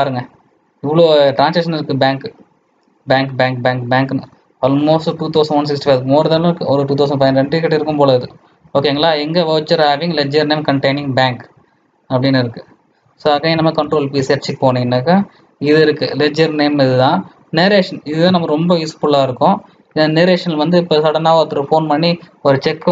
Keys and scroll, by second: 7.0 ctrl+Home, 13.8 ctrl+p.